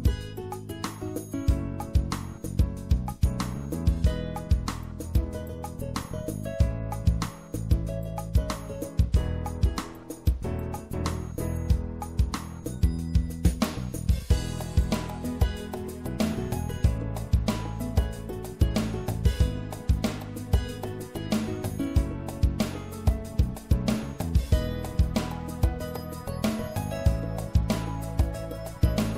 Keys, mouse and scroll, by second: 0.7-2.4 middle drag, 2.4-4.3 drag, 7.3-9.5 drag, 11.0 click, 11.9 middle click, 14.0-16.1 drag, 17.2-21.5 drag, 21.9 middle click, 22.6-23.8 middle drag, 23.8-25.5 drag, 27.2 middle click.